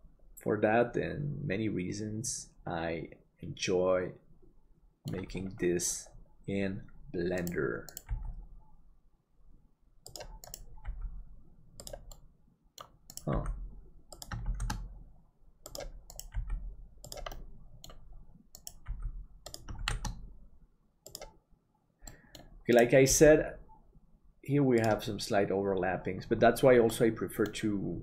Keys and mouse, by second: 8.1 g, 10.9 g, 12.2 middle click, 14.5 shift+d, 16.4 g, 17.4 middle click, 18.6 right click, 18.9 g, 19.9 shift+d, 22.1 middle click, 23.1 g, 27.0 middle click.